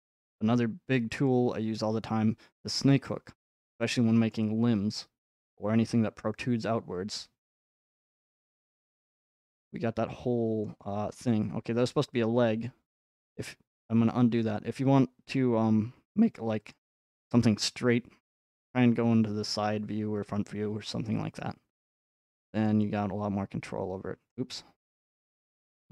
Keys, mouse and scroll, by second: 1.3 click, 3.0-3.4 scroll, 4.3-4.7 scroll, 4.7 scroll down 4, 4.8 scroll, 5.3 scroll down 3, 8.5 click, 9.1 middle click, 9.3 middle click, 10.6 scroll, 12.9 middle click, 13.3-15.4 middle drag, 16.7-18.8 drag, 22.7-24.7 drag, 24.3-25.9 middle drag.